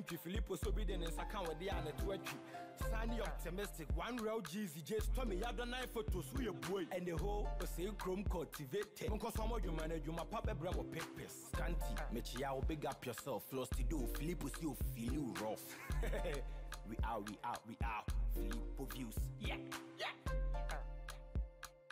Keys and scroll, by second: 13.1 ctrl+a.